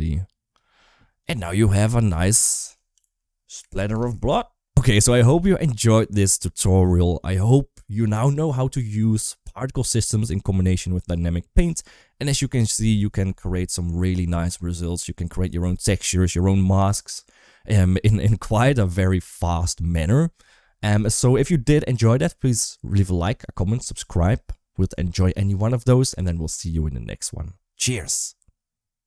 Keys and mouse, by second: 1.4 middle drag, 1.9 click, 2.1 r, 14.1 shift+middle click.